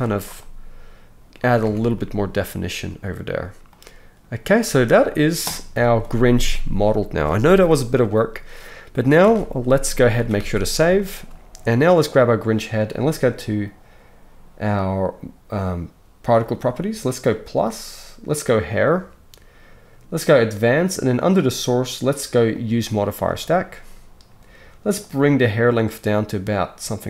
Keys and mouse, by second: 1.6 Tab, 5.7 KP_1, 9.3 alt+a, 10.2 ctrl+s, 10.4 ctrl+s, 12.0 click, 17.4-18.6 drag, 20.3 click, 21.2-22.7 drag, 22.7-25.1 middle drag, 25.1-27.0 drag.